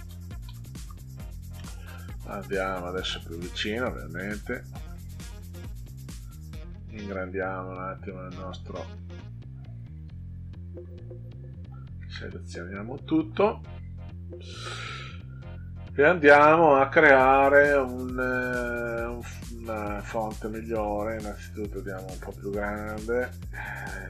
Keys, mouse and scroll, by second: 0.0-1.5 typing, 2.9 ctrl+scroll up 2, 4.3 click, 4.8 ctrl+scroll down 2, 7.1 click, 9.6 click, 9.8 click, 10.0 click, 11.9 ctrl+a, 14.9 click, 15.5 click, 19.9 click, 20.2 click, 20.4 click, 20.6 click, 21.0 click, 21.3 click, 21.5 click, 21.7 click, 21.9 click, 22.1 click, 22.3 click, 22.5 click, 22.7 click, 22.9 click, 23.1 click.